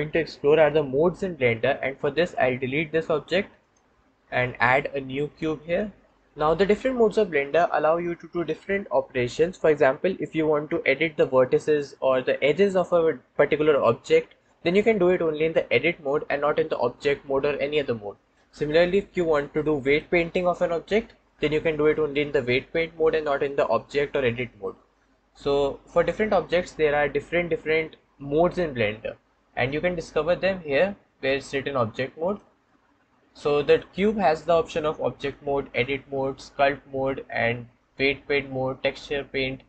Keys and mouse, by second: 3.0 x, 4.1 shift+a, 32.2-39.6 drag.